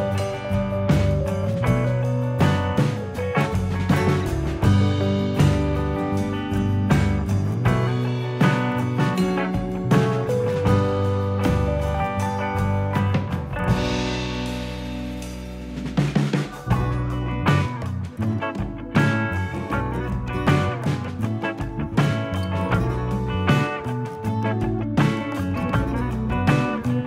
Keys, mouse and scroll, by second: 0.8 middle click, 0.8 click, 1.9 scroll down 2, 2.1 middle click, 4.2 click, 5.3 middle click, 6.3 scroll up 2, 7.4 click, 8.9 click, 9.7 click, 9.9 g, 10.8 click, 11.3 click, 11.9 g, 12.7 click, 13.1 g, 13.8 click, 14.1 g, 15.1 click, 15.5 g, 16.8 click, 17.2 g, 17.9 g, 18.3 click, 18.7 g, 19.9 click, 20.2 g, 22.1 middle click, 22.2 scroll down 1, 22.4 middle click, 23.3-23.9 scroll down 2, 23.6 middle click, 23.9-24.3 scroll up 3, 24.3 g, 25.1 middle click, 25.9 click, 26.3 shift+click, 26.7 middle click.